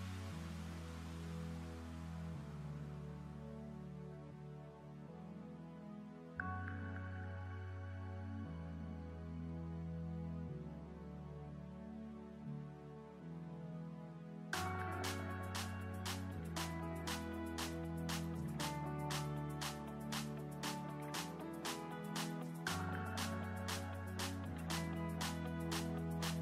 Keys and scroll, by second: 24.6 ctrl+z.